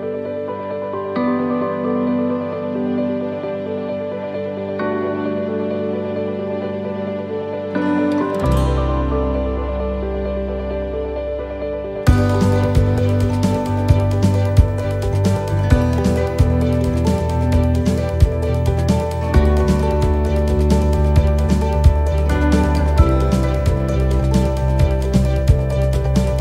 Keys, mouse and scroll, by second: 0.5 click, 1.7 right click, 3.7 right click, 3.9 e, 5.6 middle click, 6.1 scroll down 1, 6.5 middle click, 7.4 scroll up 1, 7.6 middle click, 8.3 middle click, 9.0 ctrl+r, 11.4 alt+shift+right click, 12.9 click, 14.0 middle click, 15.0 alt+shift+right click, 15.4 middle click, 16.7 alt+shift+right click, 17.1 middle click, 18.5 alt+shift+right click, 18.8 middle click, 20.1 e, 21.1 alt+s, 23.1 middle click, 24.1 middle click, 25.7 ctrl+r.